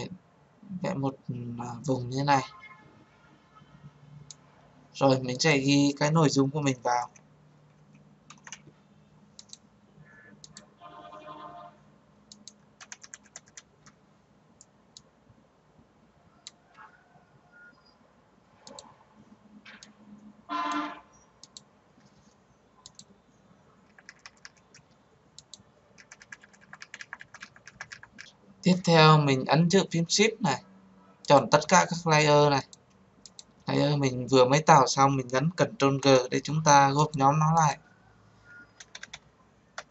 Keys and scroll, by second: 35.0 ctrl+g.